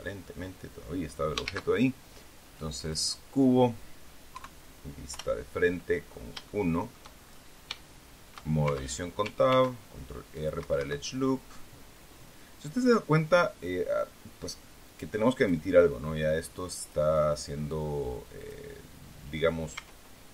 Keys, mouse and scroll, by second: 1.4 shift+a, 2.7 click, 4.2 KP_3, 5.0 KP_1, 6.0-6.3 scroll down 3, 6.4 shift+click, 7.4 scroll up 1, 7.7 shift+click, 8.5 shift+Tab, 9.4 ctrl+r, 10.3 click, 10.5 Escape, 15.3 click, 16.7 click, 18.3 click, 19.7 Tab.